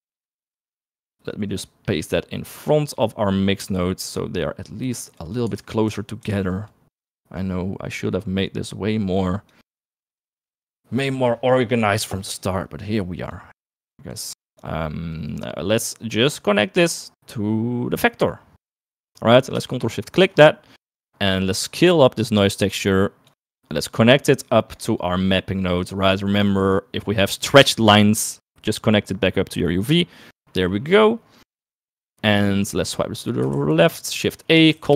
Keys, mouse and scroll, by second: 1.1-4.9 drag, 5.5 click, 5.7 click, 6.1 ctrl+z, 6.4 ctrl+z, 7.0 ctrl+z, 7.4 click, 8.3-10.0 drag, 10.6 middle click, 13.7 click, 14.4 click, 15.2 middle click, 16.2 middle click, 17.2-19.1 drag, 20.2 ctrl+shift+click, 21.7 middle click, 22.1-23.6 drag, 25.6 middle click, 26.4-30.1 drag, 30.6 middle click, 31.1 middle click, 31.5 middle click, 32.9 middle click, 33.3 click, 34.0 shift+a.